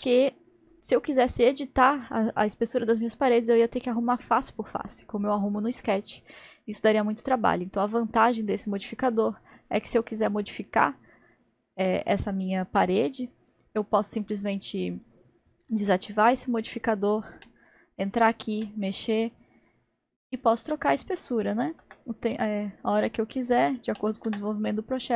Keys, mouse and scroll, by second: 8.1 click, 9.7-12.7 drag, 15.0 click, 15.8-18.5 middle drag, 18.5 Tab, 18.6 Tab, 20.4 click, 20.9-24.1 drag.